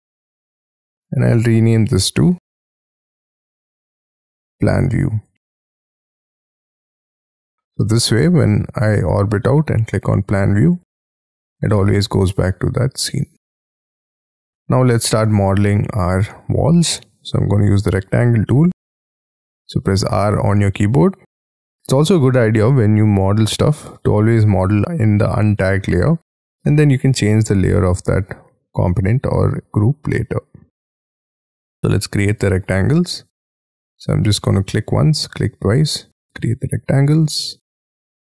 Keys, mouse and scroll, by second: 3.3-7.5 typing, 8.0 middle click, 14.1 Escape, 14.1 scroll down 2, 14.7-15.9 scroll up 12, 15.9 scroll up 5, 16.5-17.1 scroll down 5, 17.3-17.6 scroll up 3, 17.6 r, 18.4-20.6 scroll up 9, 26.9-28.0 scroll down 9, 28.0-29.7 scroll up 4, 32.5-33.2 scroll down 7, 33.2 scroll up 3, 35.9-36.6 scroll down 11, 36.6-37.3 scroll up 12, 37.3-37.9 scroll down 12.